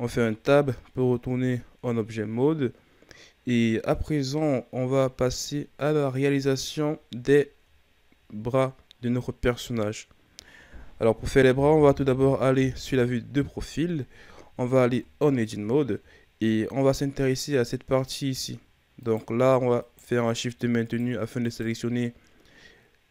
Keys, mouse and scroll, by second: 0.4-0.8 ctrl+scroll down 2, 1.2 a, 1.7-4.7 scroll down 1, 4.8-5.4 shift+scroll up 4, 5.9-6.5 scroll up 1, 6.5-6.9 scroll down 2, 6.9-7.4 ctrl+scroll up 2, 7.4-8.0 shift+scroll down 4, 8.0-9.2 scroll up 2, 9.2-10.4 scroll down 1, 10.5-10.8 shift+scroll down 2, 12.9 KP_3, 14.1-14.8 ctrl+scroll up 4, 14.8 Tab, 15.8-16.4 shift+scroll up 1, 16.4-19.0 scroll up 2, 19.0 right click, 19.8 shift+right click, 20.8 shift+right click, 21.4 shift+right click, 22.7-23.1 scroll down 4.